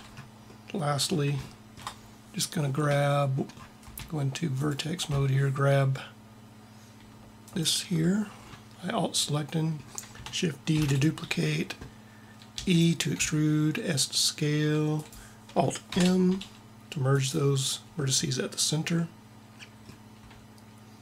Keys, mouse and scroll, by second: 4.5-6.3 drag, 7.5-9.1 drag, 10.6 shift+d, 12.4 e, 13.1 s, 15.8 alt+m.